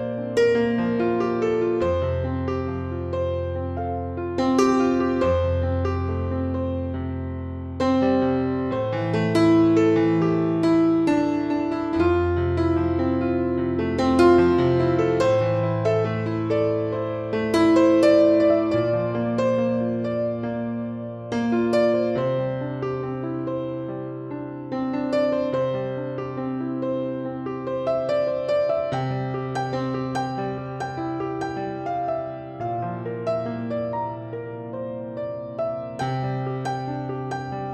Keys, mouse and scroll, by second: 0.1 scroll down 1, 0.7 KP_1, 1.1-1.5 scroll down 1, 1.5-3.5 shift+middle drag, 1.7-2.5 scroll up 1, 2.5 s, 3.5 click, 3.5-3.9 scroll down 1, 3.9 shift+middle click, 4.2 s, 4.8 click, 5.0 Tab, 5.1 scroll up 1, 5.5 alt+z, 5.7 click, 6.4 ctrl+1, 6.7 b, 8.2 click, 8.6 s, 9.0 click, 9.2 ctrl+z, 10.0 click, 11.1-14.3 drag, 12.7 ctrl+z, 13.1 s, 14.7 click, 15.2 scroll down 2, 15.3 shift+middle click, 15.5-15.9 scroll up 3, 15.9 click, 16.0 b, 17.7 click, 18.2 Tab, 18.4-19.9 middle drag, 18.9 alt+z, 19.3-19.9 scroll up 2, 19.9 click, 20.4 Tab, 20.9 KP_5, 21.1 scroll down 1, 21.2-22.3 shift+middle drag, 21.8-22.3 scroll up 2, 22.3 click, 22.7 shift+s, 23.5 Tab, 23.6-24.0 scroll down 1, 24.0 shift+a, 25.3 scroll down 1, 25.9 s, 26.5 click, 26.7 KP_1, 26.9-27.6 scroll up 2, 27.2-28.6 shift+middle drag, 27.9 r, 28.6 click, 29.4 click, 29.9-31.0 drag, 30.9 scroll down 1, 31.0-32.8 middle drag, 31.7 scroll up 1, 31.8 s, 32.8 click, 33.0-36.2 shift+middle drag, 33.6 scroll up 1, 33.8 Tab, 34.2 ctrl+r, 36.6 click, 37.3 ctrl+r.